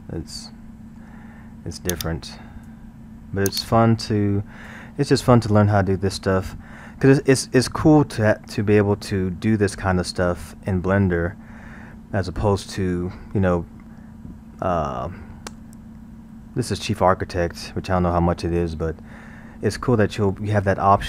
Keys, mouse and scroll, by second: 2.0-5.1 drag, 5.1-10.0 middle drag, 15.9 scroll.